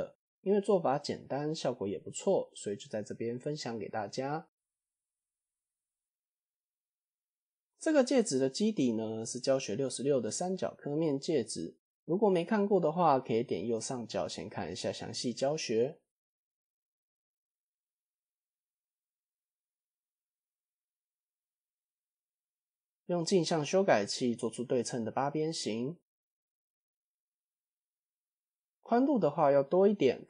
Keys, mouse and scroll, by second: 0.0-4.4 middle drag, 4.9 KP_4, 5.4 KP_1, 7.2 click, 7.8 click, 8.4-8.9 shift+middle drag, 8.9-9.2 scroll up 1, 9.3 shift+a, 13.0-13.4 shift+middle drag, 13.9-15.1 drag, 16.7-17.6 drag, 18.1-19.9 drag, 20.0 scroll down 2, 20.9 scroll down 2, 21.1 ctrl+a, 22.2 KP_3, 25.6 click, 26.8 click, 27.1 click, 27.4 Tab, 28.0 click.